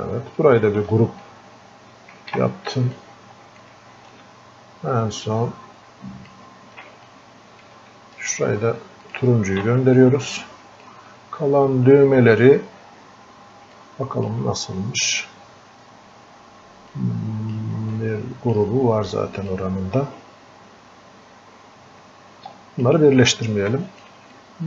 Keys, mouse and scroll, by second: 1.8 scroll down 1, 2.2 ctrl+w, 3.0 click, 4.1-7.1 ctrl+shift+drag, 7.1-9.0 drag, 10.0-11.6 drag, 11.6-12.1 scroll up 1, 13.7 scroll down 1, 13.7-15.1 alt+drag, 15.1-16.9 scroll down 1, 16.9 click, 17.9-19.5 alt+drag, 19.5-23.3 drag, 23.3 alt+click, 24.4-24.6 drag.